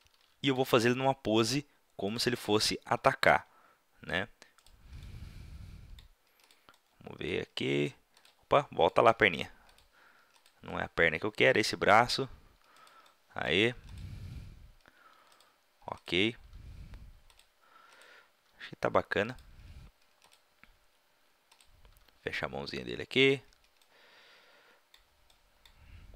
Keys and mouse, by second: 0.8 r, 2.1-4.5 drag, 2.6-3.9 right drag, 3.0 r, 4.6-5.5 drag, 9.1 r, 9.6 middle click, 11.4-12.0 right drag, 11.6 r, 13.3-14.8 drag, 13.9-14.6 right drag, 14.3 r, 15.4 drag, 15.4 right drag, 16.0-17.2 drag, 16.5 r, 18.4 r, 19.3 click, 20.2-20.9 drag, 22.0 r, 23.2-23.5 middle drag, 23.9-25.2 middle drag, 25.2 click, 25.4-26.1 drag.